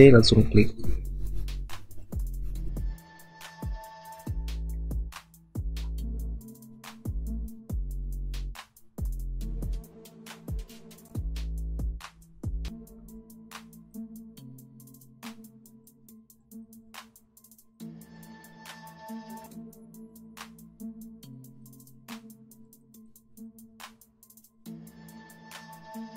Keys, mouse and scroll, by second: 0.5 alt+click, 5.0 alt+click, 14.1 typing.